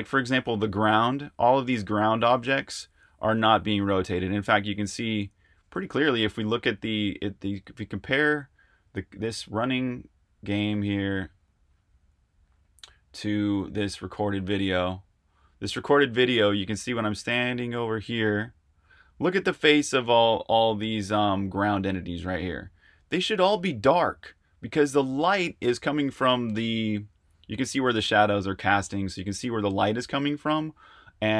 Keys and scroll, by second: 1.9-7.2 typing, 10.9 super+Tab, 16.4-17.7 typing.